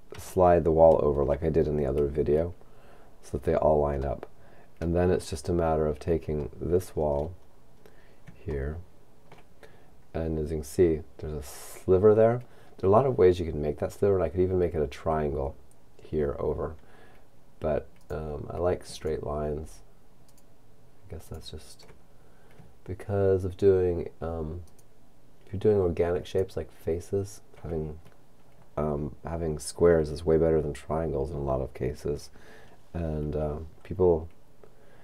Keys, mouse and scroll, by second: 0.4-2.2 shift+middle drag, 4.7 shift+middle click, 5.5-6.5 shift+scroll up 2, 6.5-7.5 middle drag, 7.5-7.8 scroll up 1, 8.7 shift+middle click, 9.2-10.2 shift+middle drag, 18.0-20.1 right drag, 20.3 right click, 22.2-23.2 scroll down 2, 24.7 right click, 26.4 right click.